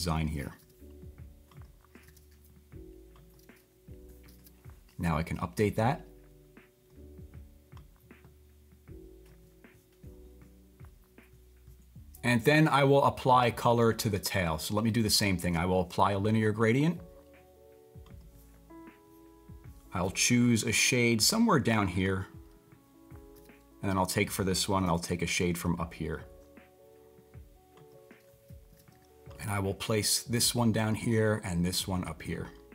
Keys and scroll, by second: 0.6 typing, 2.0 typing, 4.4 typing, 20.6 typing, 23.3 typing, 24.8 typing, 28.7 typing.